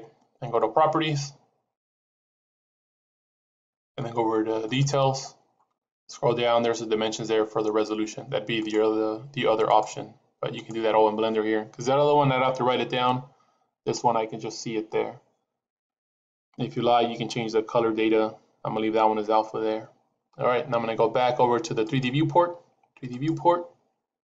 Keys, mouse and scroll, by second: 21.8 click.